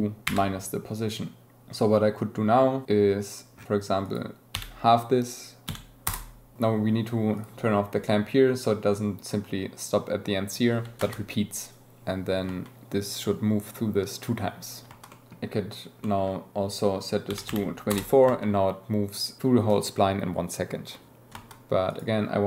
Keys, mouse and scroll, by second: 7.3 click, 7.7 space, 11.0 shift+Left, 11.0 space, 15.1 click, 16.0 click, 16.5-17.9 drag, 18.2 space, 21.3 space, 21.8-22.4 drag.